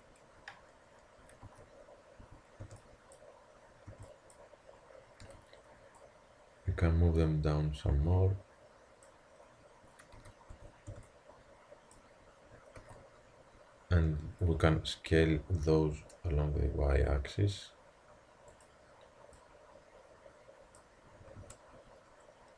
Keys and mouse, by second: 0.0 Tab, 1.4 z, 2.2 a, 2.6 b, 3.9 b, 5.3 z, 6.0 click, 10.1 z, 10.5 a, 10.9 b, 12.8 z, 14.5 s, 19.4-21.3 drag, 21.4 a.